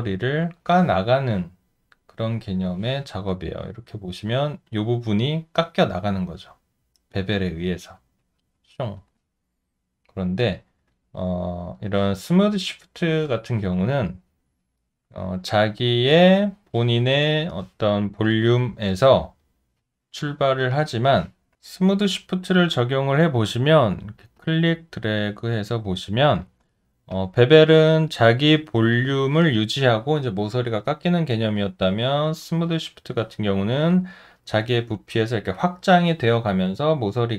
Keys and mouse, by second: 3.6 alt+click, 11.2 alt+right click, 13.4 alt+middle click, 13.9 alt+right click, 14.4 alt+middle click, 27.1 alt+click, 27.8 alt+middle click, 33.1 alt+middle click, 33.9 alt+click.